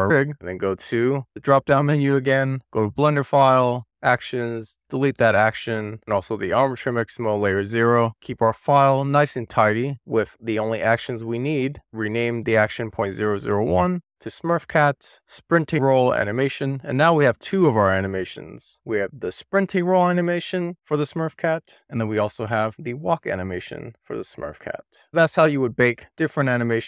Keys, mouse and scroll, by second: 0.5-1.8 drag, 2.8 click, 5.5-8.2 right drag, 8.2 click, 8.5-10.1 right drag, 10.1-11.6 drag, 11.9-16.4 drag, 15.6 l, 18.3 click, 21.5 click, 21.8 click.